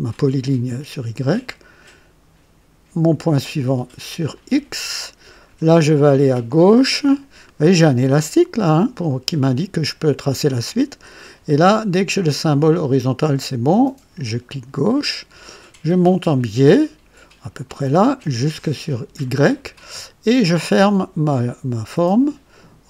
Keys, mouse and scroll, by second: 4.3 click, 14.5 click, 19.2 click.